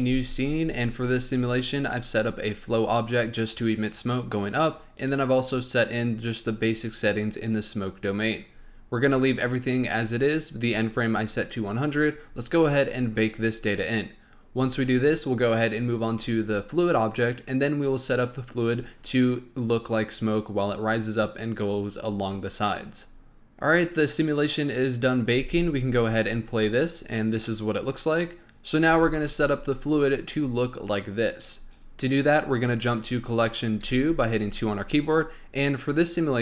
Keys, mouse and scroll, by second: 1.8 click, 4.9 click, 6.5-8.6 scroll down 1, 8.6-10.1 scroll down 8, 10.1-11.8 scroll down 3, 11.8-13.1 scroll up 8, 13.1-23.4 drag, 25.3 space, 33.8 2.